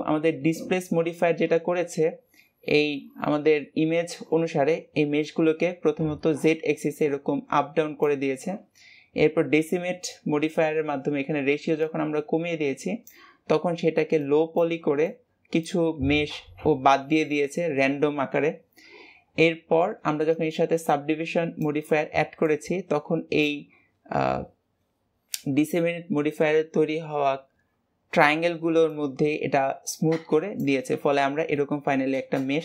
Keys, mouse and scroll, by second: 31.5-32.6 middle drag.